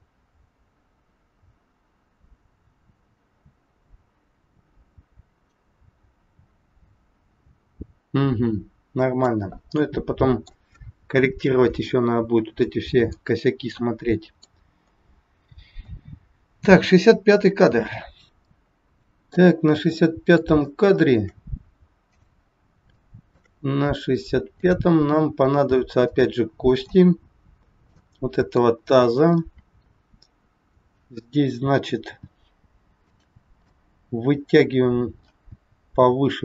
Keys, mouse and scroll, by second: 9.7 middle click, 12.6 middle click, 14.7-15.2 scroll down 1, 18.4 middle click, 19.6 scroll up 1, 19.9 middle click, 20.8 shift+middle click, 22.1 click, 23.0 shift+middle click, 23.6 scroll up 3, 24.5 click, 26.1 middle click, 27.9 middle click, 29.1-29.5 scroll down 2, 29.5 middle click, 32.0 g, 33.6 middle click, 35.5 g.